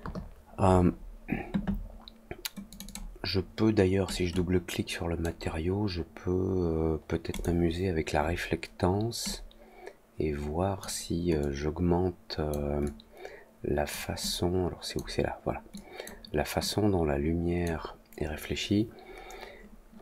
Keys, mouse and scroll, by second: 2.6 click, 2.8 click, 4.2-5.1 drag, 7.2 click, 9.2-10.7 drag, 11.3-12.4 drag, 12.8-13.8 drag, 14.2-14.9 drag, 15.7-16.0 drag, 16.5-17.6 drag.